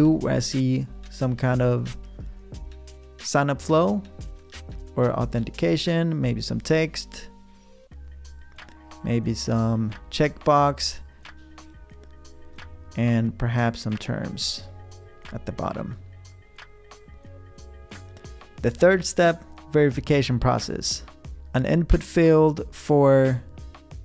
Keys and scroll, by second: 21.4 v.